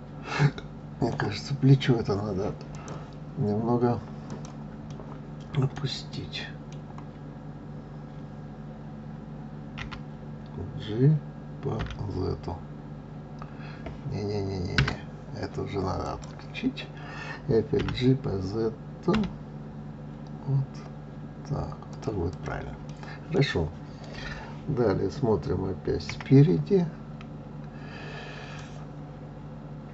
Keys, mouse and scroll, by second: 2.7-4.4 drag, 4.9-9.1 middle drag, 16.0 click, 17.8 g, 22.3 click, 22.8-25.8 middle drag, 26.0 KP_1, 28.5 click.